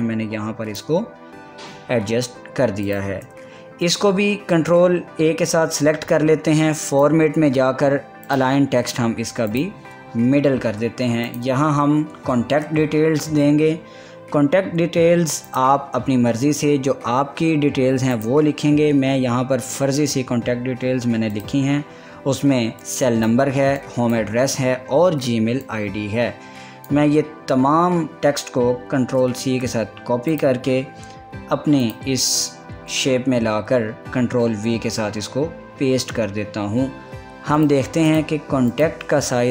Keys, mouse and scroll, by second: 2.5 scroll up 1, 3.5 click, 4.5 ctrl+a, 7.5 click, 12.5 ctrl+a, 16.2 click, 19.0 click, 19.8 scroll down 1, 21.9-29.6 drag, 29.6 ctrl+c, 30.9 click, 32.7 click, 35.0 ctrl+v, 37.1 click, 38.4-39.5 drag.